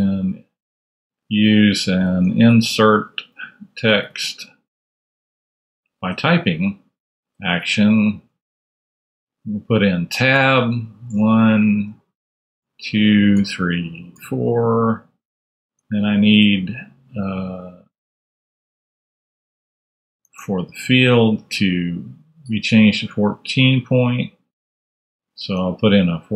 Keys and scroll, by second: 2.0 ctrl+super+a, 2.6-4.9 typing, 6.0 Return, 8.2-9.1 typing, 9.4 super+a, 10.6 super+c, 11.3 super+Right, 15.1 super+v, 15.6 super+Tab, 19.4 super+Tab, 20.1 shift+super+Tab, 25.4 super+Tab.